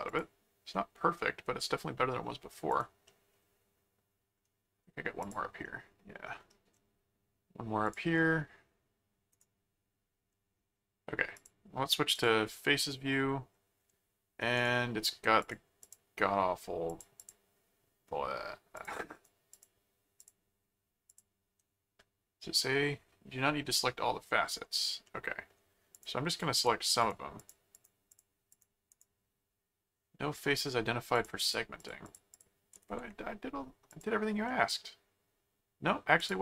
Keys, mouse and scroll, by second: 0.1 click, 0.7-2.2 middle drag, 2.7 click, 3.1-4.3 middle drag, 5.2 click, 5.6 middle click, 7.9 click, 9.3 right click, 11.3 click, 12.1 click, 12.9 middle click, 14.5 right click, 15.4 click, 16.9 click, 18.7 click, 20.2 click, 21.1 click, 23.7 middle click, 25.0 middle click, 25.9-29.0 drag, 28.9 right click, 31.1-32.9 drag, 33.9 click, 34.5-35.9 middle drag, 36.2 click.